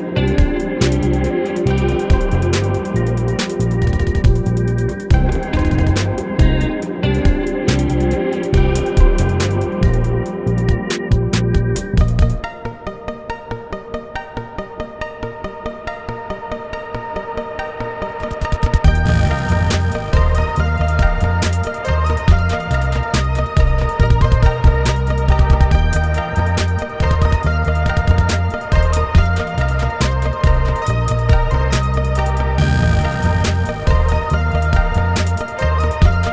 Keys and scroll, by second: 0.3 ctrl+e, 1.3 ctrl+e, 4.5 ctrl+e, 7.3 ctrl+1, 8.8 ctrl+r, 9.6 Escape, 10.1 ctrl+e, 12.9 ctrl+1, 13.4 ctrl+r, 13.7 Escape, 14.6 ctrl+e, 15.8 ctrl+e, 22.0 ctrl+r, 22.6 Escape, 23.9 ctrl+z, 24.2 ctrl+r, 25.1 Escape, 25.7 ctrl+e, 26.3 Escape, 27.5 ctrl+3, 33.1 alt+z, 35.7 alt+z.